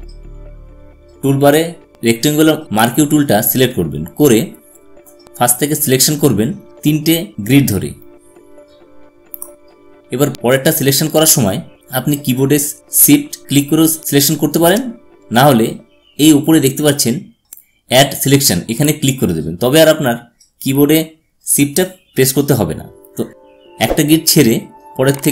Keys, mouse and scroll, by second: 0.6 space, 0.7-5.3 drag, 5.7 click, 7.3-11.2 drag, 13.4 shift+Num_Lock, 19.7 click.